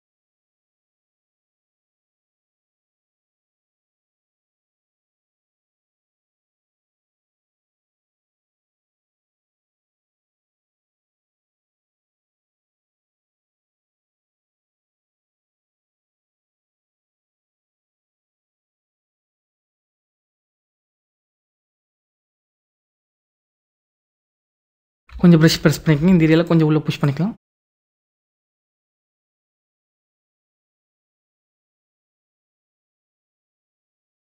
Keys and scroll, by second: 6.6 ], 24.8 ].